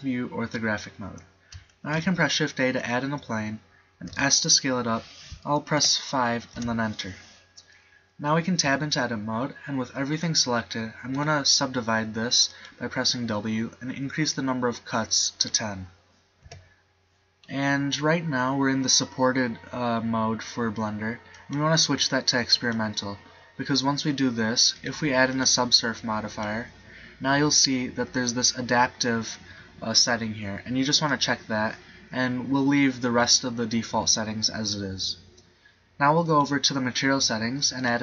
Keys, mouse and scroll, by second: 1.8 shift+a, 4.2 s, 8.7 Tab, 11.2 w, 16.6 Tab.